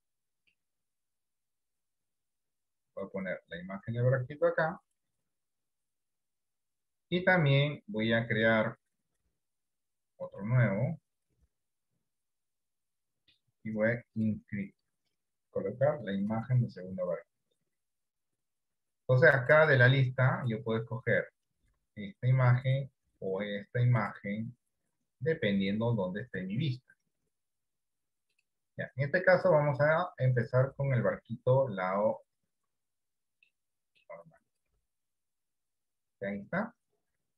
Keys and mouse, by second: 19.6 click, 22.9-24.5 drag, 33.8 middle click, 37.2 click.